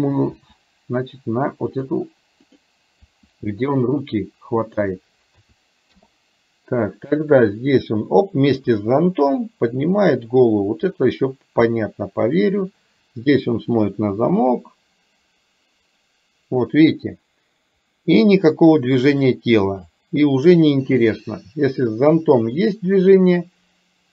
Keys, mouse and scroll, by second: 0.5 r, 3.1 r, 5.4 a, 6.0 i, 7.1-24.1 drag.